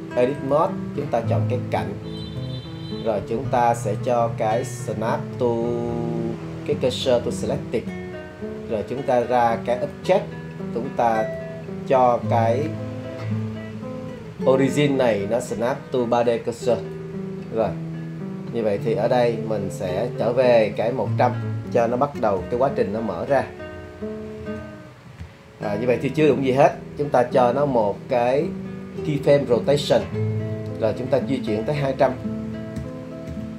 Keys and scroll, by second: 21.8 1, 22.4 0, 22.6 0, 24.4 Return, 27.7 i, 32.8 2, 33.3 0, 33.4 0.